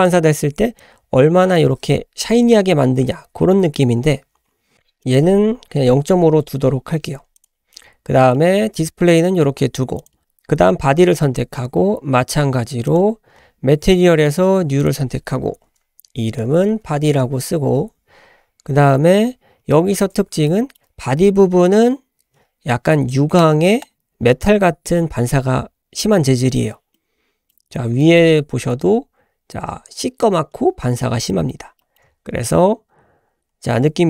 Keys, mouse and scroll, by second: 0.8-4.7 drag, 5.0-6.5 drag, 7.4 click, 7.7 middle click, 10.0 click, 12.9-13.3 drag, 14.8-17.8 drag, 20.6 shift+middle click, 27.1-27.5 middle drag, 27.6-27.9 scroll down 2, 28.0-28.3 shift+middle drag, 28.4-30.0 scroll up 4, 31.3-31.7 shift+middle drag, 31.8 shift+middle drag, 32.9-33.8 scroll down 3.